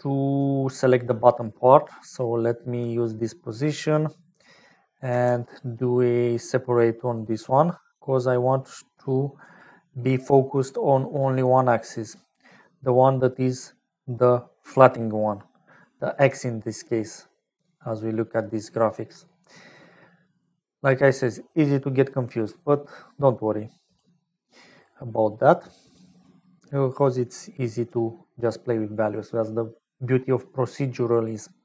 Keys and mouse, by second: 0.7 middle click, 2.1 click, 3.5 click, 4.6 middle click, 5.2 shift+a, 8.5-9.6 drag, 10.2 middle click, 11.0 click, 11.8 middle click, 13.5 middle click, 16.3 shift+middle click, 17.0 middle click, 17.7 click, 17.9 middle click, 20.3-24.1 drag, 24.3 click, 25.1 click, 26.2 click, 27.4 click, 28.7 middle click, 29.8 middle click.